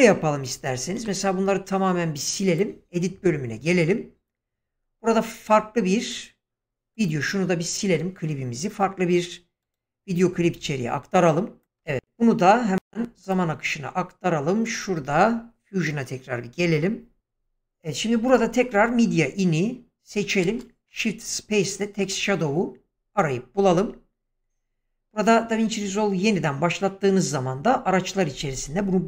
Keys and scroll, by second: 0.9 Delete, 7.8 Delete, 11.8 F9, 20.4 shift+space.